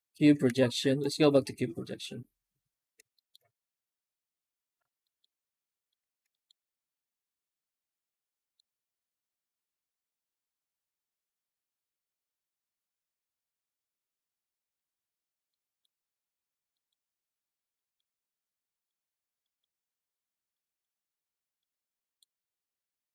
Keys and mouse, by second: 0.0 Tab, 0.3 z, 3.0 shift+middle drag, 4.9 middle drag, 5.6 shift+middle drag, 5.9 alt+shift+z, 6.1 middle drag, 8.2 middle click, 8.3 middle click, 12.3 click, 14.5 click, 15.3 middle click, 16.6 middle click, 17.6 middle drag, 18.5 middle click, 19.3 middle click, 20.4 middle click, 21.5 shift+middle click, 23.0 z.